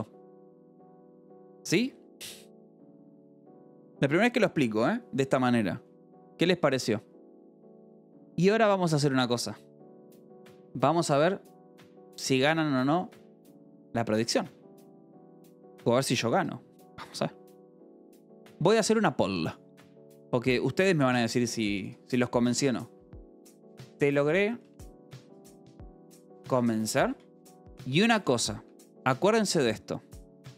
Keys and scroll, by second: 23.4-27.2 typing, 27.4 Tab, 28.3 i, 28.5 Tab, 29.1 o.